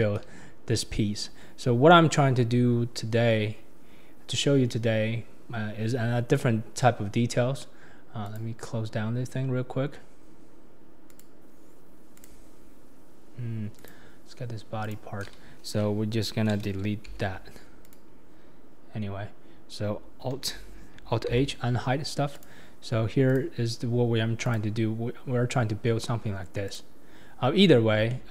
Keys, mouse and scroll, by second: 1.8 scroll up 2, 8.2 click, 11.1 click, 12.1 click, 13.7 click, 14.8 click, 17.1 x, 17.8 click, 21.3 alt+h, 22.3 click, 23.3 click, 23.8-24.4 scroll up 1, 24.4 click, 25.1-26.6 scroll down 3, 26.6 click, 27.5 scroll up 2, 28.1-28.3 shift+middle drag.